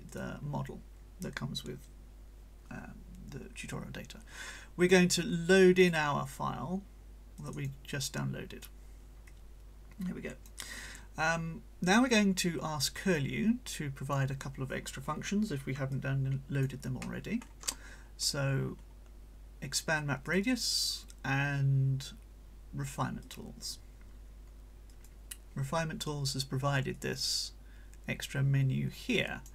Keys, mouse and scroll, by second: 0.1 click, 5.3 click, 7.4 click, 9.3-10.7 drag, 12.1-14.3 drag, 15.9-16.8 drag, 17.0 middle click, 18.6-19.0 scroll down 1, 20.3 click, 23.2 click, 24.9 click, 26.9-29.5 drag.